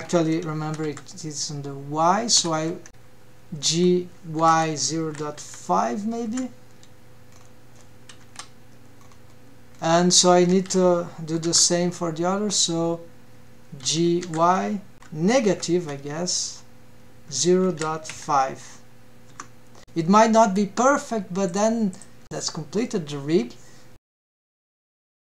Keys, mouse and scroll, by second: 2.4 g, 6.6-7.4 scroll down 2, 7.5 KP_1, 8.3-8.8 scroll up 3, 9.0 scroll down 2, 9.8 alt+a, 10.7 l, 13.1 g, 19.5 scroll up 3, 19.8 click, 19.8 scroll down 2, 20.1 ctrl+Tab, 20.3 click, 20.6 g, 23.8 click.